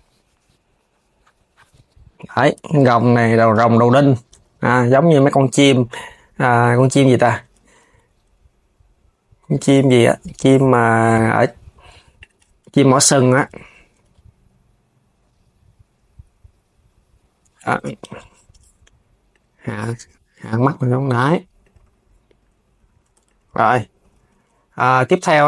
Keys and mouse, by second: 2.3 click, 2.9 Tab, 3.0 click, 3.4 KP_3, 4.0 Tab, 4.7 click, 6.0 click, 7.1 KP_3, 7.6 g, 11.8-12.9 drag, 13.1 KP_3, 13.6 g, 18.9 click, 19.2 KP_3, 19.6 g, 22.5 s, 22.8 Tab, 22.9 click, 23.7 s.